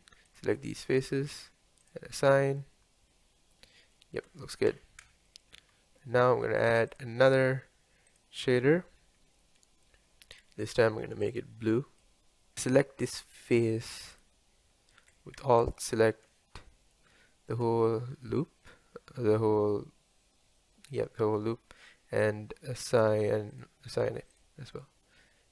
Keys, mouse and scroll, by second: 0.5 alt+click, 1.9 click, 2.6-7.0 middle drag, 7.0 click, 8.4 click, 9.4-12.0 middle drag, 12.0 click, 12.6-14.2 middle drag, 14.2 click, 15.7 alt+click, 16.3-23.5 middle drag, 23.5 click, 24.4 click.